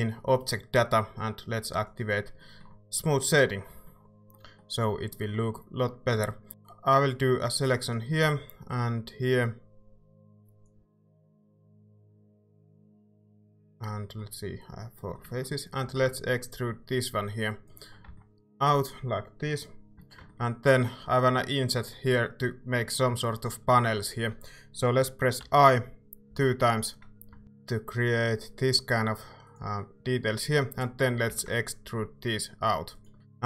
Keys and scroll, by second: 6.1 Tab, 6.2-7.0 typing, 8.2 c, 15.8 e, 18.1 Tab, 20.1 Tab, 25.4 i, 26.3 i, 31.3 e, 33.1 Tab.